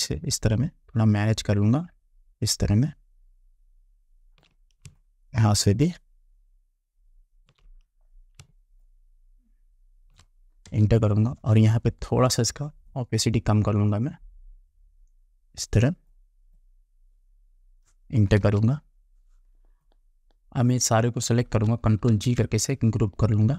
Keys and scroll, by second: 10.9 Return, 18.5 Return, 22.2 ctrl+g.